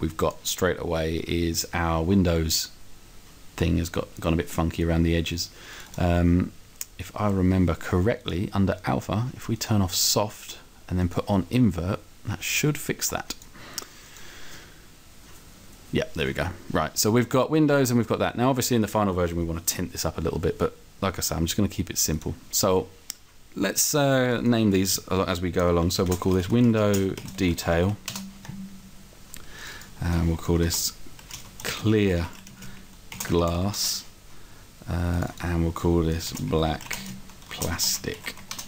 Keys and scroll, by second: 26.1-27.8 typing, 30.7-33.6 typing, 33.9 Return, 36.3-38.4 typing.